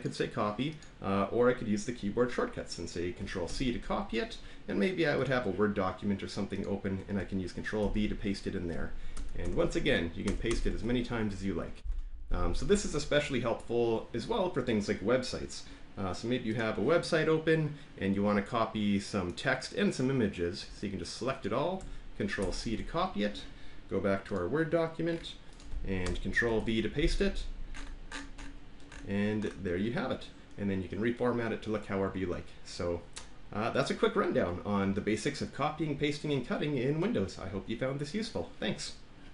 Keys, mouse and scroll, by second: 0.0 click, 0.8 click, 3.4 ctrl+c, 5.2 click, 6.6 click, 7.8 ctrl+v, 9.1 Return, 9.5 Return, 9.6 ctrl+v, 10.2 Return, 10.4 Return, 10.8 ctrl+v, 16.5 click, 19.4-20.3 drag, 20.5 click, 21.4 click, 22.4 ctrl+c, 24.3 click, 25.5 click, 26.0 Return, 26.5 ctrl+v.